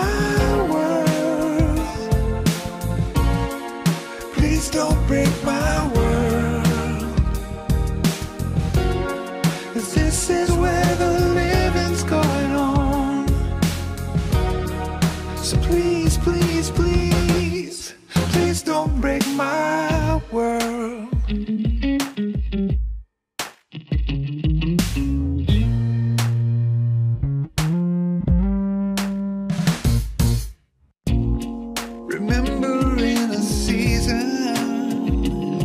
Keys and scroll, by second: 0.8 Return, 1.1 ctrl+r, 2.0 ctrl+r, 17.9 Tab, 22.4 Tab, 25.0 Tab, 28.8 Tab, 30.9 Tab, 33.3 Tab.